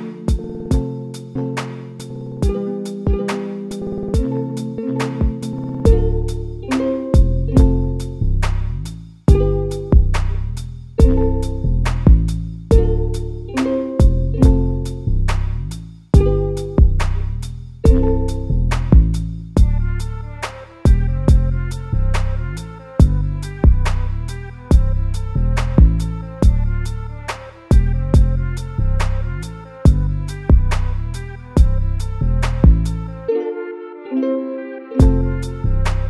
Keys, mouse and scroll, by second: 0.2 KP_Divide, 1.0-1.6 scroll up 1, 1.6-2.7 shift+middle drag, 2.7 1, 2.9 click, 3.3 middle click, 4.0 shift+click, 4.5 KP_Add, 4.7 KP_Add, 6.3 x, 7.1 middle click, 7.8 scroll up 2, 8.9 click, 9.3 shift+click, 10.3-12.6 middle drag, 12.6 click, 15.3 middle click, 16.0-16.5 scroll down 1, 16.5 3, 16.7 click, 16.8 click, 17.3 x, 18.0-20.2 middle drag, 20.2 KP_Divide, 20.8 Tab, 22.3 Tab, 22.7 2, 24.2 click, 24.3 click, 25.0 z, 26.0 alt+s, 27.7 s, 30.5 a, 30.8 Tab, 31.1 a, 31.3 a, 31.8-33.3 middle drag, 33.3-33.8 scroll down 2, 33.8-34.7 middle drag, 34.7-35.0 scroll up 2, 35.0-36.0 middle drag.